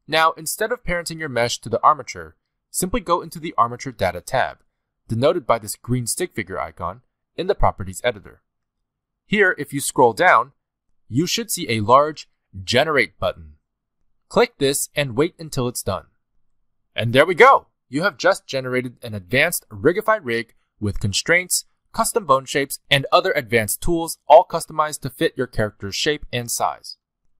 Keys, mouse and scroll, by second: 0.5 click, 1.2 click, 1.8 middle click, 3.0 scroll up 2, 3.3 shift+middle click, 8.0 click, 9.9 scroll down 2, 11.0 scroll down 8, 14.2 click, 18.3-18.9 scroll down 3, 18.7 middle click, 19.0 scroll up 2, 20.1 click, 21.4 click, 21.7 middle click, 22.1 g, 23.5 middle click, 24.8 click, 25.4 r, 26.3 middle click.